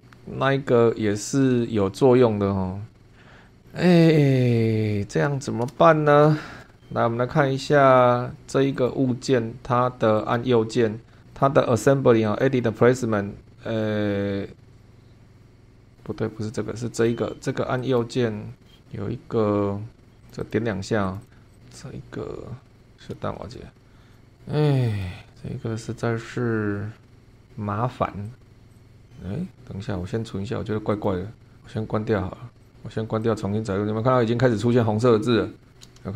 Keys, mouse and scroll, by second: 3.4 click, 3.7 scroll down 1, 4.2 middle click, 5.7-6.2 shift+middle drag, 8.8 click, 10.2 right click, 12.2 click, 15.9 click, 17.0 click, 17.8 right click, 20.2 click, 21.0 click, 21.5 click, 23.0 scroll down 2, 23.6 shift+middle click, 24.1 click, 24.4 click, 24.9 right click, 28.2 click, 28.7 click, 30.9 click, 31.6 click, 32.6 click, 33.2 click.